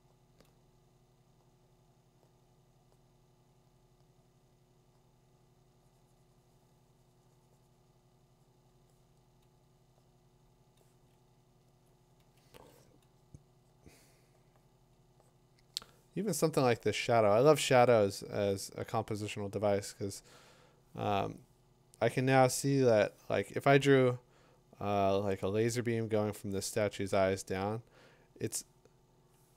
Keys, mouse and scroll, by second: 11.8-14.9 drag, 12.5 2.